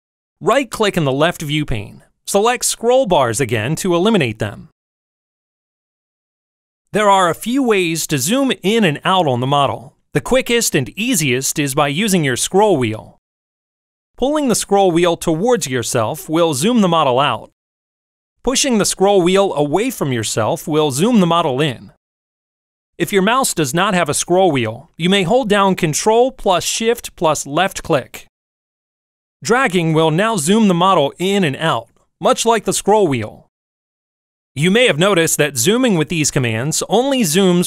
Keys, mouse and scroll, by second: 2.0 right click, 5.4 click, 12.2 middle click, 12.5 middle click, 13.7 middle click, 13.7-14.5 scroll down 2, 14.5 middle click, 14.8-16.9 scroll down 3, 15.7-17.5 middle drag, 18.0-20.6 scroll up 6, 18.1-19.4 middle drag, 19.8 middle click, 20.6-21.9 middle drag, 30.3-32.1 ctrl+shift+drag, 32.8-36.0 ctrl+shift+drag.